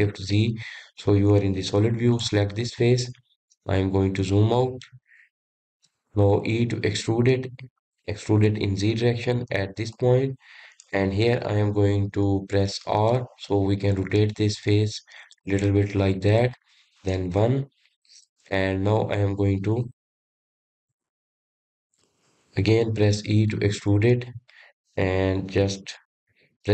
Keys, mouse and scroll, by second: 1.5 shift+z, 3.3 click, 3.9-4.7 scroll down 4, 4.7-5.0 scroll down 2, 5.2-7.5 middle drag, 7.5 e, 14.2 r, 17.2-17.6 scroll up 2, 17.6-18.5 scroll down 2, 18.5 KP_1, 24.3 e.